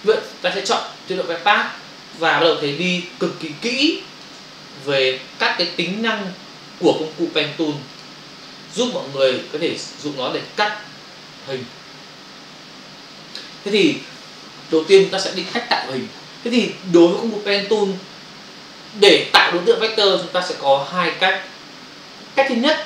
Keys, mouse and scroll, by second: 1.5 click, 3.1 ctrl+click, 5.3 click, 5.5 click, 8.7 click, 8.8 double click, 9.3 click, 9.4 click, 10.3 click, 10.4 click.